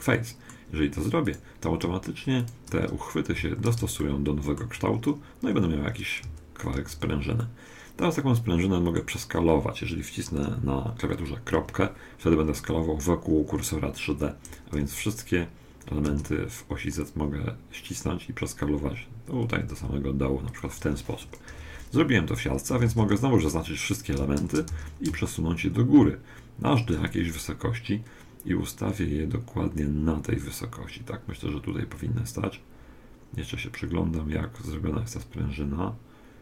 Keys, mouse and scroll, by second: 1.2-4.3 right drag, 3.4 f, 4.0-5.8 middle drag, 5.8-7.2 scroll down 1, 6.2 a, 6.8 a, 7.4-9.4 middle drag, 11.6 ., 14.8 s, 21.5 KP_1, 22.7 a, 23.0 a, 23.6-25.7 middle drag, 24.4 shift+d.